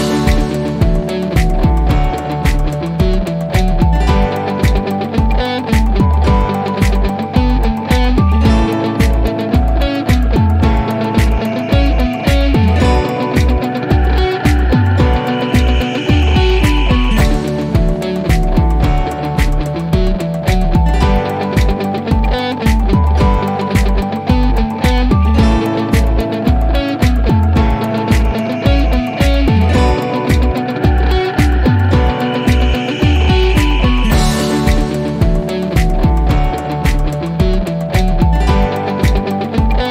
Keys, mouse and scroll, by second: 0.3 click, 2.6 click, 3.6-4.6 middle drag, 7.7-8.1 scroll down 1, 8.8-10.3 alt+middle drag, 13.4 click, 15.1-16.6 scroll up 1, 21.5 click, 26.9 click, 28.9 click, 32.1-35.0 drag, 38.4 click.